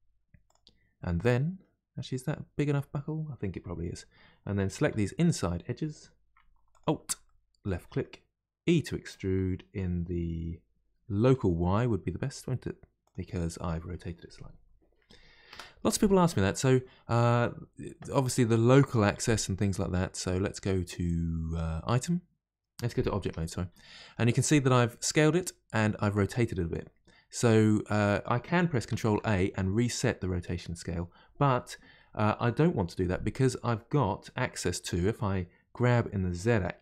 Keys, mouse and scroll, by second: 1.0-2.1 middle drag, 2.1-4.8 scroll up 1, 4.8 2, 6.7 alt+click, 7.2-9.0 middle drag, 9.0 e, 15.5 Return, 21.8 click, 23.2 Tab, 29.0 ctrl+a, 35.8 g.